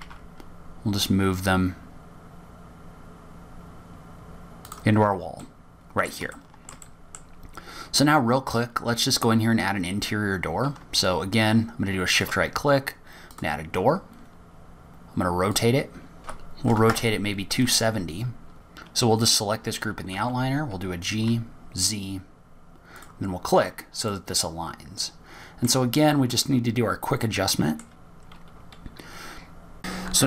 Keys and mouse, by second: 0.6 g, 6.9-7.6 middle drag, 7.8-8.1 shift+middle drag, 8.2 middle click, 12.4 shift+click, 14.8 click, 16.2-18.5 drag, 19.2 click, 21.5 g, 25.5-27.0 middle drag, 27.8-28.1 middle drag.